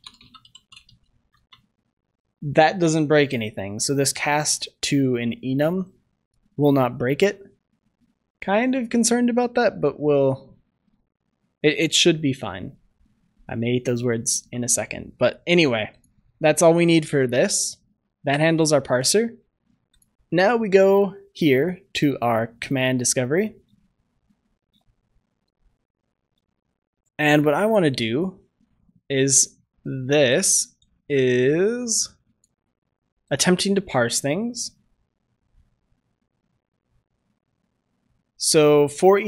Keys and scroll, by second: 1.2 ctrl+s, 14.6 ctrl+s, 16.0 ctrl+shift+s.